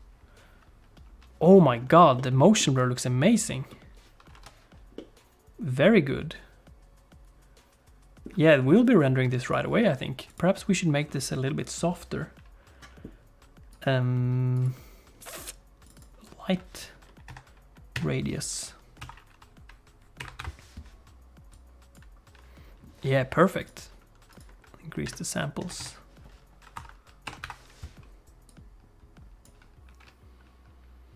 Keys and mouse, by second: 10.3 click, 13.8-16.0 drag, 17.2-18.3 drag, 19.0 F11, 21.6 F11, 25.1 shift+click, 26.8 F11, 28.9 F1.